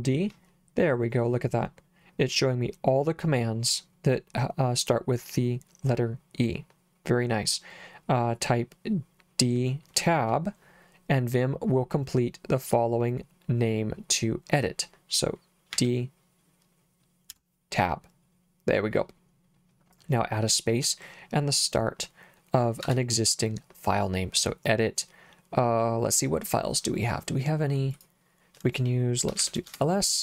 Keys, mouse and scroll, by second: 15.8 d, 17.3 Tab, 22.8 space, 27.9 click, 29.1-29.9 typing.